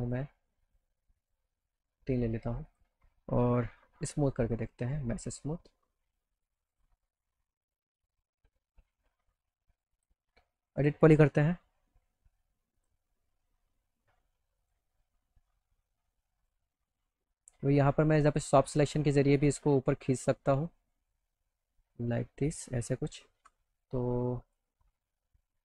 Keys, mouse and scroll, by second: 0.0 click, 0.6 click, 1.2 click, 2.7 click, 4.0 e, 6.7 click, 10.0 click, 10.8 click, 11.7 e, 12.8 click, 14.6 click, 16.3 click, 18.2 click, 19.5 click, 20.4 click, 21.8-22.9 drag, 23.4 ctrl+z, 24.3 click, 25.2-25.6 drag.